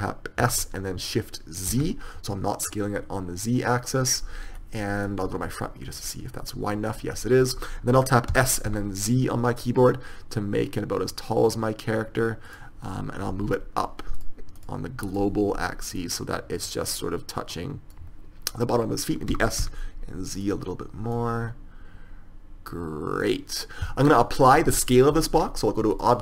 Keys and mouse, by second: 0.8 s, 4.9-8.7 middle drag, 5.6 KP_1, 8.7 s, 15.0-18.3 drag, 19.8 s, 21.5-23.6 drag.